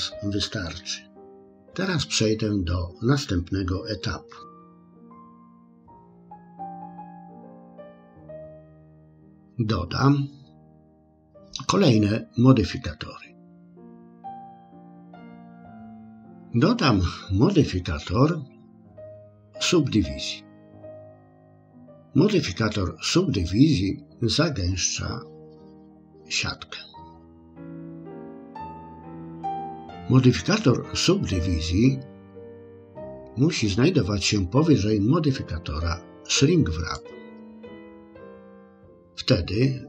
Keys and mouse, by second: 4.3 Tab, 5.9 middle click, 6.1 middle click, 6.3 shift+middle click, 6.6 KP_1, 7.0 KP_6, 7.3 KP_6, 8.2 KP_4, 14.5 click, 18.8-21.2 drag, 37.0-38.1 drag.